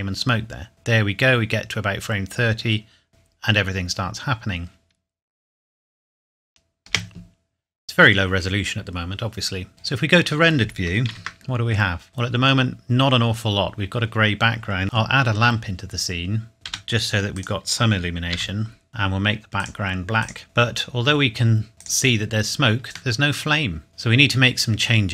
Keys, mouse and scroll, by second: 6.9 space, 11.3 ctrl+s, 12.1 click, 13.3 scroll down 1, 14.8 shift+a, 16.5 click, 16.7 g, 17.3 click, 18.3 r, 18.9 click, 20.4 middle click, 21.7 click, 22.4-23.1 scroll down 1, 23.2 middle click, 23.9 click.